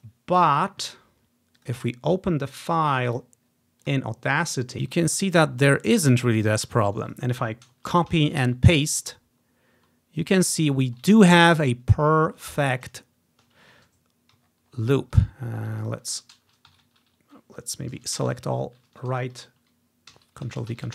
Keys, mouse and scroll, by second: 0.0-1.3 drag, 1.7-4.8 drag, 6.5 scroll up 1, 6.6-7.1 scroll down 2, 7.1 click, 8.1 ctrl+c, 8.2 Right, 8.6 ctrl+v, 9.5-10.3 scroll up 1, 11.3 click, 13.1-14.0 scroll down 1, 16.0-17.1 drag, 16.8 Right, 17.0 Right, 17.1 Right, 18.1 ctrl+a, 19.0 Right, 20.3 ctrl+v, 20.7 ctrl+v.